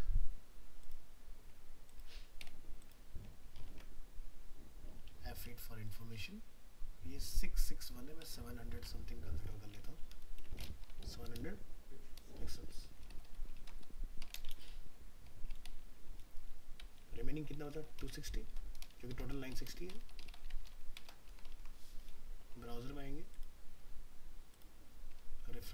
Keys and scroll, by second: 3.6 ctrl+t, 8.8 alt+Tab, 13.6 ctrl+c, 14.5 ctrl+v, 21.7 ctrl+s.